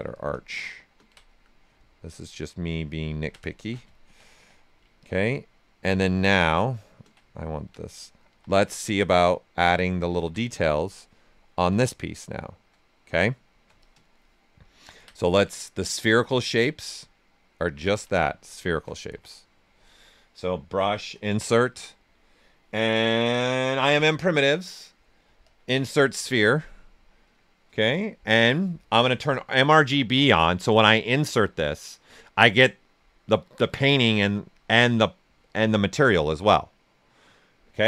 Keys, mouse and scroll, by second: 0.1 ctrl+click, 0.3 ctrl+space, 1.7-3.1 drag, 3.1 ctrl+click, 3.5 shift+f, 3.9 ctrl+right click, 4.3 q, 4.9 ctrl+click, 5.7 ctrl+space, 8.2 w, 8.9 click, 10.4 q, 10.7 right click, 11.4 ctrl+right click, 12.2 shift+f, 13.1 right click, 13.8 ctrl+click, 13.9 ctrl+space, 16.0 w, 16.9 click, 18.3-21.6 typing, 23.7 click, 29.0 click.